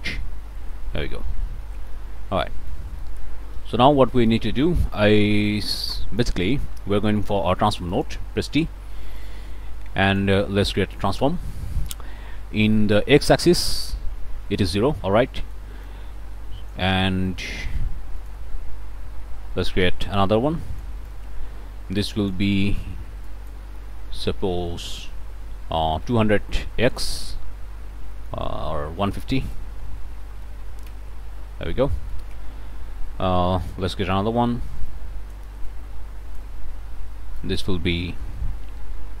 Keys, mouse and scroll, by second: 0.0 1, 0.6 click, 1.2 click, 1.7 click, 2.1 middle click, 2.5 click, 3.5 f, 3.9-4.9 scroll up 2, 5.7 click, 6.4-7.2 scroll up 2, 6.5 click, 7.2 click, 7.9 click, 8.6 t, 9.2-10.4 drag, 15.4 click, 15.8-16.9 drag, 16.9 scroll up 1, 17.3 click, 18.2 click, 19.7 t, 20.2-21.3 ctrl+drag, 25.5-26.5 typing, 27.7 scroll up 2, 28.1 click, 29.3 click, 29.8-31.0 typing, 31.9-32.3 scroll up 1, 33.6 click, 34.3 t, 34.8 ctrl+click, 35.7 ctrl+click, 37.4 click.